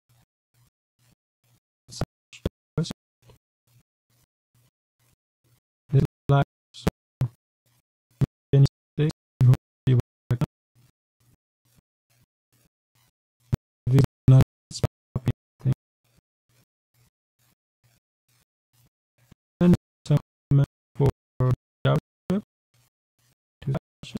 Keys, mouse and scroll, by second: 1.3 shift+,, 3.4 BackSpace, 3.9 Return, 4.5-10.8 typing, 12.2-15.6 typing, 16.4 Right, 17.4 shift+., 18.1 Return, 19.6 Return, 20.1 Up, 20.1 Tab, 20.9-24.1 typing.